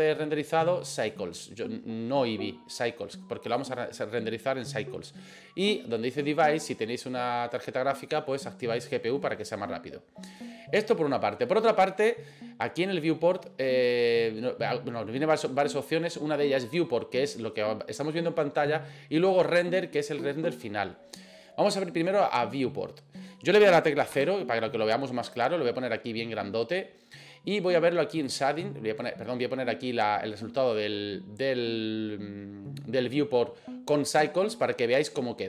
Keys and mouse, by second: 1.1-3.3 drag, 24.2 KP_0, 28.4 click.